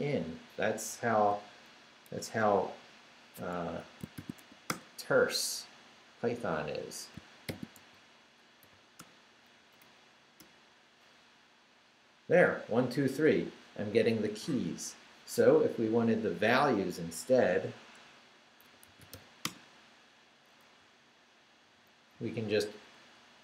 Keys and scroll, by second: 1.1 Left, 2.7 Right, 3.6 Escape, 3.9-4.9 typing, 7.5 shift+;, 7.7 shift+s, 8.6 h, 9.0 Return, 9.6 Up, 10.4 Return, 18.4-19.6 typing, 20.8 Right, 23.0 Left.